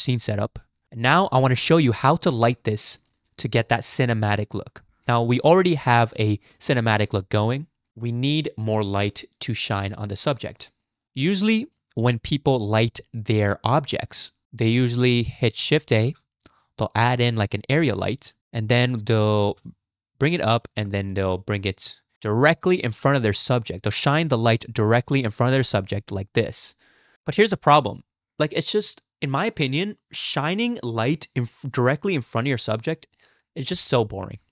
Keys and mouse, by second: 5.7 drag, 6.2 z, 7.9 KP_0, 11.0 shift+z, 11.1 shift+click, 11.4-11.8 drag, 12.6-13.0 drag, 13.0-14.4 middle drag, 15.9 shift+a, 18.4 g, 20.6 g, 22.1 click, 22.6 r, 25.6-26.4 drag, 27.1 z, 27.5 KP_0.